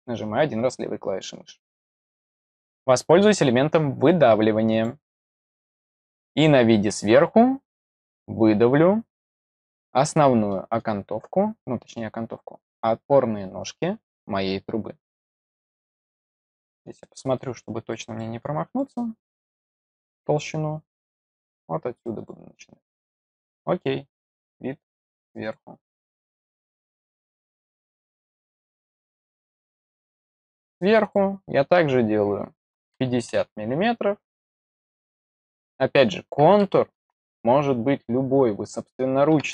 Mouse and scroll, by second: 4.6 click, 6.0 click, 9.1-9.4 scroll up 1, 10.4 middle click, 10.9 scroll up 2, 11.5 middle click, 16.0 middle click, 16.9 middle click, 17.5 middle click, 18.1 middle click, 18.7 middle click, 19.4 middle click, 19.9 middle click, 22.1 click, 22.8 middle click, 24.7 right click, 25.4 click, 25.9 click, 28.1-29.2 scroll up 6, 29.5 middle click, 30.0 scroll up 2, 30.9 click.